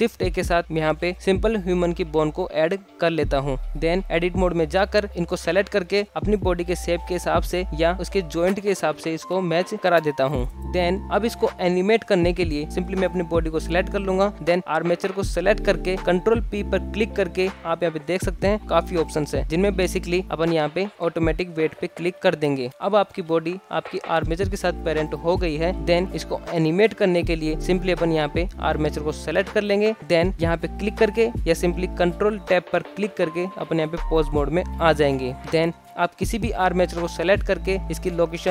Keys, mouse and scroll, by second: 2.4 alt+z, 4.2 s, 5.1 Tab, 5.2 scroll up 2, 5.2 shift+middle click, 5.3 click, 5.5-8.2 typing, 5.7 ctrl+z, 6.3 click, 6.5 scroll down 2, 6.7 scroll up 3, 6.7 shift+middle click, 7.0 click, 7.1 click, 7.4 shift+middle click, 7.5 scroll down 1, 7.6 click, 7.8 click, 8.1 click, 8.4 scroll down 1, 8.4 shift+middle click, 8.4 scroll up 1, 8.7 alt+z, 9.1 shift+middle click, 9.5-11.0 middle drag, 11.1 scroll up 1, 11.4 KP_1, 12.9 click, 14.2 alt+z, 15.5 shift+click, 18.2 ctrl+p, 24.0-24.5 middle drag, 24.5 alt+z, 25.8-26.1 scroll down 1, 26.1-26.6 shift+middle drag, 26.6-27.6 scroll down 2, 27.8 click, 28.6-28.9 scroll up 1, 31.2-32.5 drag, 33.1 ctrl+Tab, 33.3 ctrl+Tab, 33.3 ctrl+Tab, 34.3 ctrl+alt+Tab, 34.3 alt+z, 34.4 click, 34.6-34.9 scroll up 2, 34.7-38.5 typing, 35.8 click, 36.2 shift+middle drag, 36.4 alt+shift+z, 36.5 shift+middle drag, 37.1 alt+shift+z, 37.3 click, 38.1 click.